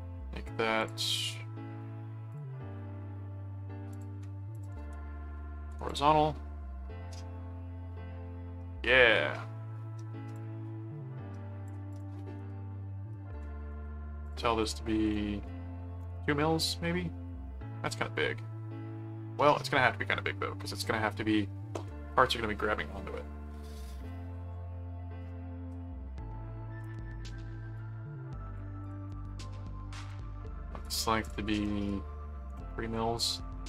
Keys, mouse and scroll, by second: 0.8 click, 1.1 right click, 2.3 click, 3.9 click, 4.5 alt+click, 4.8 alt+c, 5.6 alt+h, 5.8 click, 10.3 click, 11.9 click, 12.2 right click, 13.7 right click, 14.2 click, 27.7 click, 28.8 click, 29.1 right click, 30.1 click, 30.8 click.